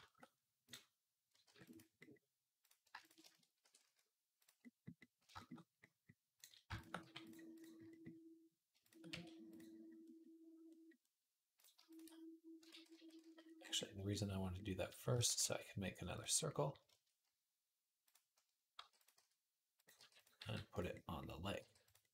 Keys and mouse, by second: 1.2 ctrl+r, 1.5 middle click, 2.4 click, 2.7-6.1 shift+middle drag, 3.4 e, 6.1 click, 6.2-8.6 shift+middle drag, 6.8 g, 8.6 shift+click, 8.7-11.4 shift+middle drag, 8.9 e, 11.4 click, 11.6 shift+middle click, 12.5 ctrl+z, 12.7 ctrl+z, 13.0 ctrl+z, 15.1 shift+a, 17.8 click, 18.6 g, 19.0 s, 19.7-22.1 drag, 19.8 g, 20.2 s, 21.4 g.